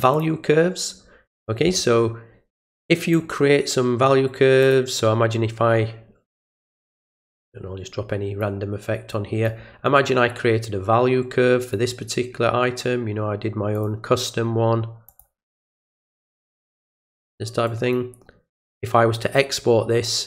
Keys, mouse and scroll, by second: 0.1 click, 2.6-3.1 drag, 4.6 click, 7.3-8.4 drag, 9.1 click, 11.6 click, 13.7 click, 15.1 click, 15.9 click, 16.8 click, 17.7 click.